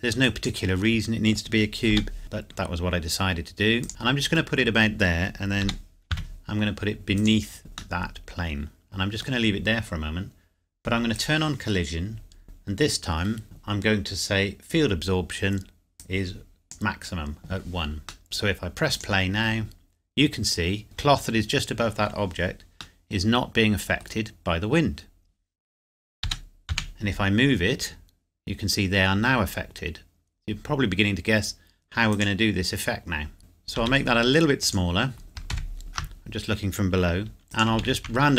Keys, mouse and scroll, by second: 0.2 click, 1.9 g, 3.8 click, 3.9 middle click, 4.8-5.6 scroll down 1, 5.6 g, 6.1 z, 7.2 click, 8.0 middle click, 11.1 click, 16.0 click, 18.2 middle click, 18.9 click, 20.8 middle click, 23.0 middle click, 26.2 g, 26.7 x, 32.1 click, 33.4 middle click, 33.7 s, 34.6 click, 35.5 ctrl+KP_7, 37.4 click, 37.8 shift+d.